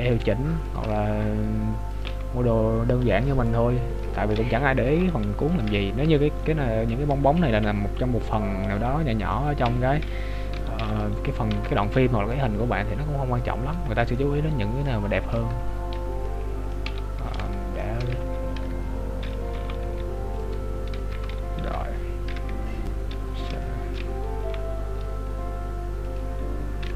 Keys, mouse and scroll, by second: 0.8 r, 5.7 KP_3, 6.4 middle click, 6.9-7.3 scroll up 1, 7.5 KP_Decimal, 8.3 middle click, 10.6 KP_7, 11.6 Tab, 12.3 click, 14.2 middle click, 15.1-15.9 scroll up 4, 15.4 Tab, 16.3 middle click, 16.9 KP_7, 17.5 shift+middle click, 18.7 Tab, 19.7 g, 22.4 KP_3, 23.7 shift+middle click, 24.5 g.